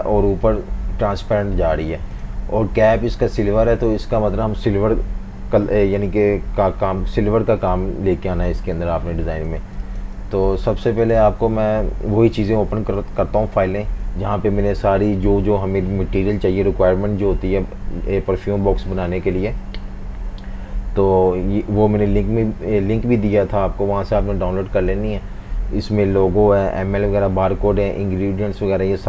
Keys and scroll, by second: 9.5-10.9 typing, 20.4 F18.